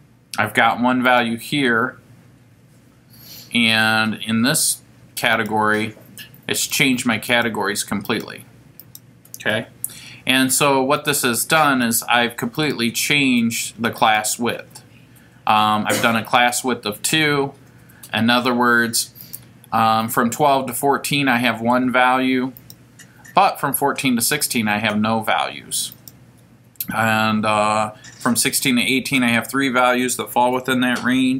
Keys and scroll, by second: 1.1 Right, 5.4 Left, 6.6 Right, 11.0 Left, 16.0 Right, 19.3 Left, 22.6 Right.